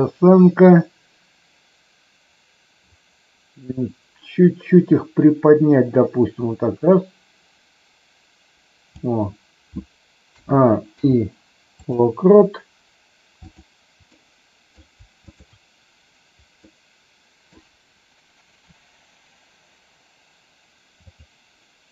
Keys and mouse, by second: 3.8-8.9 drag, 10.9 i, 13.4 click, 14.2 middle click, 15.2 shift+click, 16.6 middle click, 21.0 click.